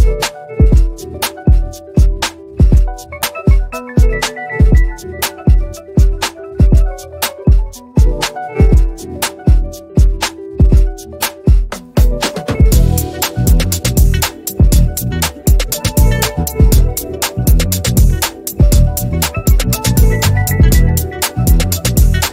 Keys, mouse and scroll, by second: 1.0 ctrl+scroll down 1, 1.7 click, 1.8-6.8 drag, 7.7 ctrl+c, 8.0 click, 8.3 ctrl+alt+v, 10.0 ctrl+alt+v, 11.9 click, 12.3 ctrl+c, 12.6 click, 13.0 ctrl+alt+v, 14.6-21.5 drag.